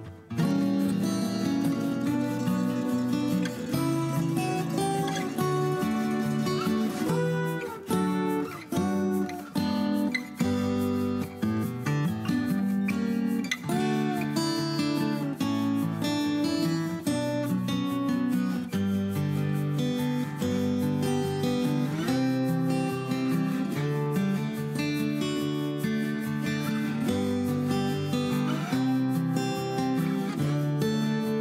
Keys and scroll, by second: 2.6-4.6 typing, 8.4 l, 9.7-13.9 typing, 15.1 p, 15.6 space, 16.3 ctrl+g, 18.3 r, 19.9 p, 20.4 Escape, 22.3-23.3 typing, 28.7-31.4 typing, 31.1 Return.